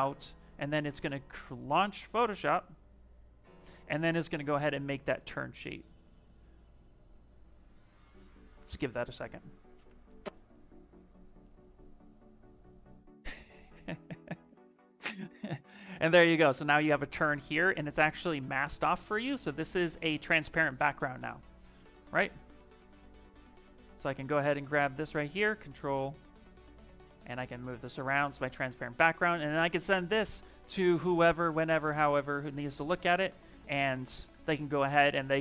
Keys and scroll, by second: 22.3 t, 22.9 Escape, 23.6 v, 24.9 ctrl+t, 33.2 Escape.